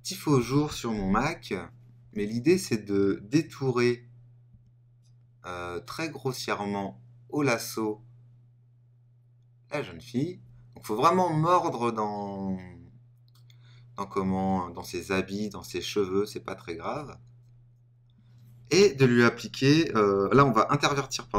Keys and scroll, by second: 0.9 super+-.